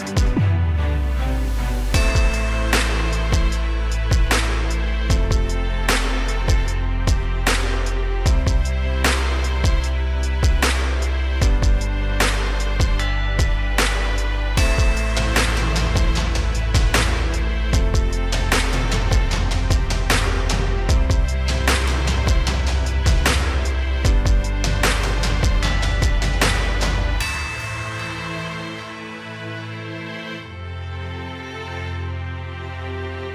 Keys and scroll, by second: 2.7 ctrl+g, 24.2 ctrl+j, 24.5 ctrl+j, 24.7 ctrl+j, 24.8 ctrl+j, 25.1 ctrl+j, 25.3 ctrl+j, 25.5 ctrl+j, 29.6 ctrl+j, 29.7 ctrl+j, 30.3 ctrl+j.